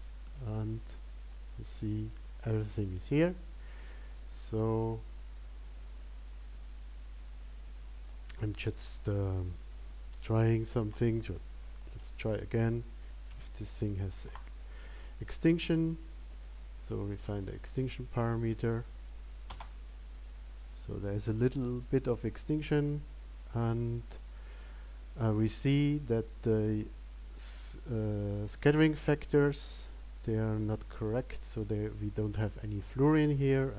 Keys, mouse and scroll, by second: 17.9 click.